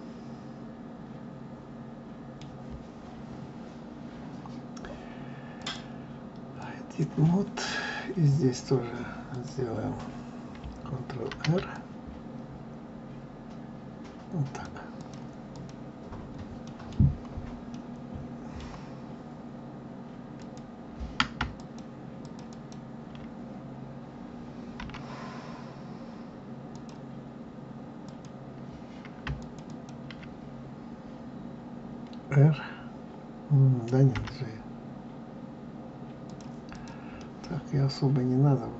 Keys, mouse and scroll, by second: 5.5-8.6 drag, 9.3 click, 11.3 ctrl+r, 15.5 click, 16.6-20.3 middle drag, 20.3 click, 21.5 shift+click, 22.2 shift+click, 22.5 shift+click, 24.8 g, 28.0 click, 29.3 shift+click, 29.6 shift+click, 34.1 g, 36.7 click, 37.1-38.7 middle drag.